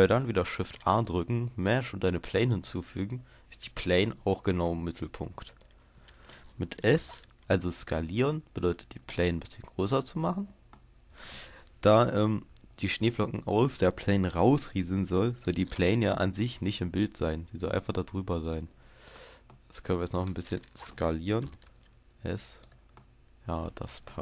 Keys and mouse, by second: 0.5 shift+a, 7.2 s, 10.0-11.6 drag, 11.6 middle click, 12.1 KP_0, 13.7-15.3 middle drag, 15.5 g, 18.5-20.5 drag, 20.5-21.7 middle drag, 21.7 s, 22.7 click.